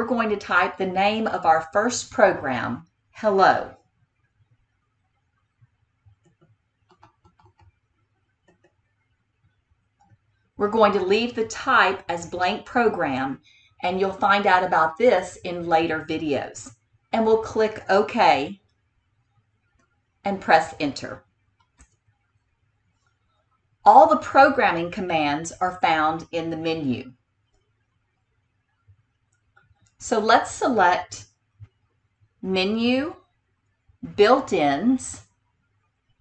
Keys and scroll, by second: 6.2 h, 6.9 e, 7.3 l, 8.6 o, 18.5 Tab, 21.7 Return, 32.9 Menu.